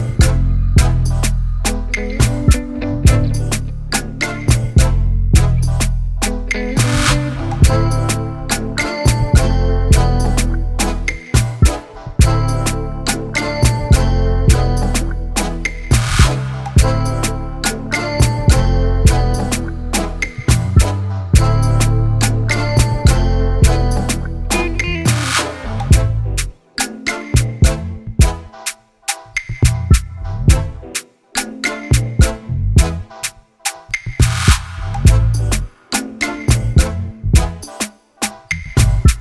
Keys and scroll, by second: 5.1 ctrl+c, 5.2 ctrl+v, 11.0 ctrl+=, 25.6 ctrl+c, 25.7 ctrl+v.